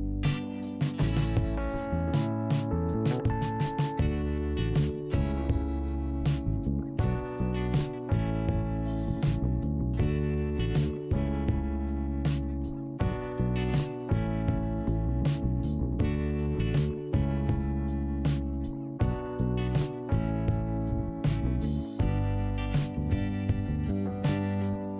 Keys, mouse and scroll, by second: 1.1 click, 2.1 click, 2.8 click, 3.2 scroll down 1, 3.8 click, 4.2 click, 5.0 click, 5.8 click, 7.0 l, 8.1 click, 8.9-9.3 scroll down 1, 9.9 click, 11.0 click, 12.2 i, 13.6 click, 14.5 click, 15.9 click, 22.5 click, 22.9 scroll down 1, 24.5 scroll down 1, 24.6 click.